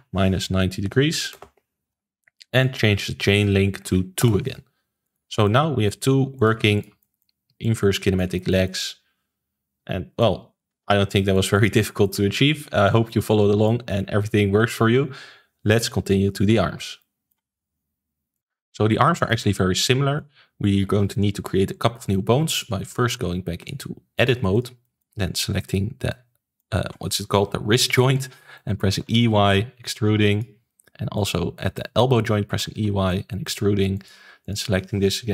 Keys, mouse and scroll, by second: 5.2 ctrl+s, 5.4-6.3 middle drag, 6.3 click, 6.7 shift+click, 6.9-7.6 middle drag, 7.6 click, 8.3-10.7 shift+middle drag, 10.7 alt+g, 11.1-11.5 shift+middle drag, 11.5 click, 11.9 ctrl+s, 12.0-14.0 middle drag, 14.0 ctrl+s, 16.9-22.5 shift+middle drag, 22.5 click, 23.5-24.6 drag, 24.8 shift+middle click, 25.6 click, 26.0-28.2 middle drag, 28.2 scroll up 1, 28.5 middle click, 28.9 e, 31.1 click, 31.5 shift+middle click, 32.5 e, 34.4 click.